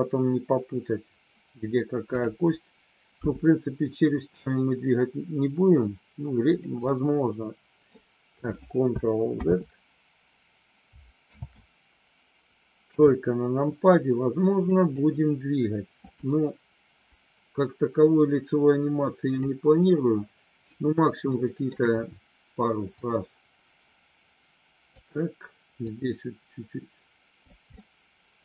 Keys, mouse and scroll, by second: 3.1 g, 6.5 click, 7.0 middle click, 9.5 ctrl+z, 11.3 ctrl+z, 12.9 KP_3, 14.7 click, 17.0-19.3 drag, 21.3 shift+middle click, 22.9-24.9 drag, 25.9-27.5 drag, 27.9-28.4 middle drag.